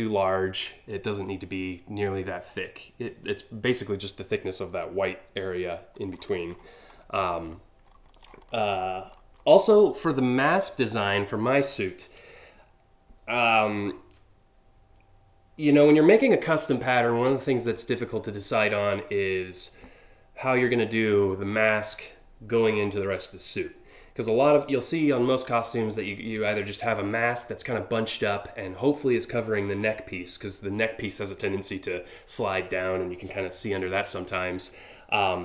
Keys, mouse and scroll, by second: 5.2 scroll up 2, 5.8 scroll down 1, 6.2-6.8 alt+scroll up 7, 7.2 scroll up 1, 7.9-8.9 scroll down 5.